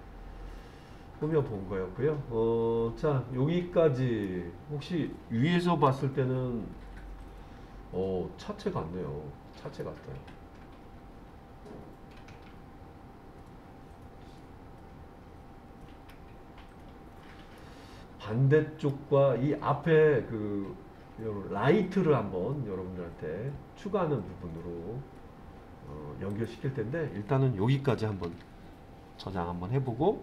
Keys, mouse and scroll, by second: 5.9 KP_7, 7.2-7.8 scroll down 2, 9.8-16.1 middle drag, 16.8-17.6 scroll up 1, 17.6-18.9 middle drag, 25.0-26.3 scroll up 1, 26.3 click, 28.3 ctrl+s.